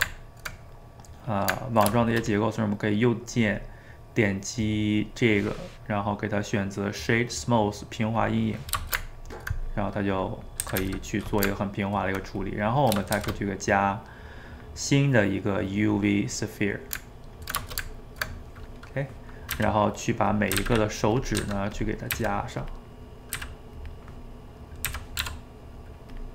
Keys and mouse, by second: 2.7-5.8 right drag, 8.9-10.7 ctrl+shift+middle drag, 10.7 a, 10.8 a, 11.1-12.5 middle drag, 12.5 click, 12.7 middle click, 13.1 shift+a, 17.1-19.6 ctrl+middle drag, 19.6 s, 20.5 s, 21.4 g, 22.2 s, 23.0 middle click, 23.4 s, 24.9 s.